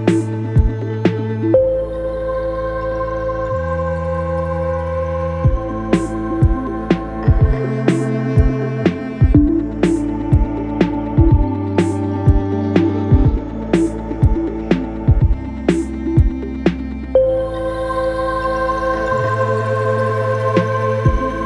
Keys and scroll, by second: 3.4 2, 20.7 b, 21.1 space, 21.3 l.